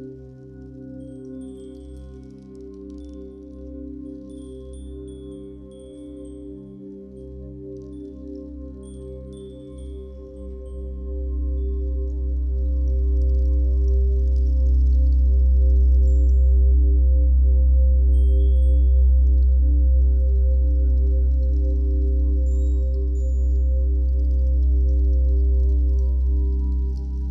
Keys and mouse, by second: 1.2 click, 5.4 ctrl+z, 7.9 ctrl+z, 8.6 z, 10.8 click, 11.8 ctrl+alt+click, 12.6 ctrl+t, 13.4 shift+click, 15.0 click, 15.4 Return, 15.5-16.6 typing, 18.2 click, 19.9 right click, 23.1 click, 24.4 a, 25.3 click, 26.6 d, 27.0 t.